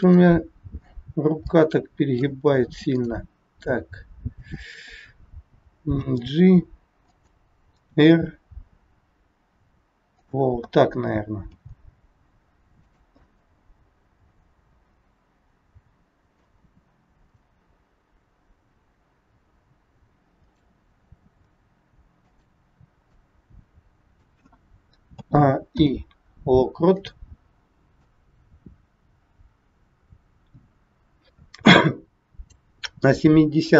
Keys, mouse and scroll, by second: 1.4 middle click, 2.9 click, 4.4 shift+click, 6.0 g, 7.9 r, 11.5 g, 13.2 middle click, 17.2 click, 21.1 r, 22.8-23.2 scroll down 3, 23.1 middle click, 23.1 scroll up 1, 25.1 a, 25.6 i, 28.0 click, 33.0 middle click.